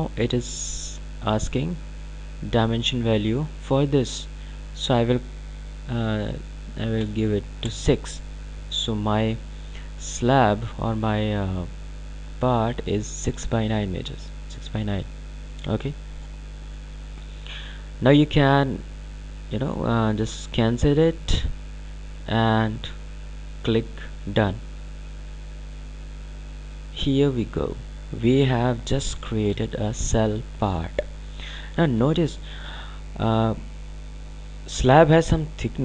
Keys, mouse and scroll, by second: 9.8-10.4 scroll down 2, 10.4-11.0 scroll up 2, 21.0 click, 24.9 click, 28.3-28.6 scroll down 2, 28.6-29.5 scroll up 2, 29.7 ctrl+alt+click.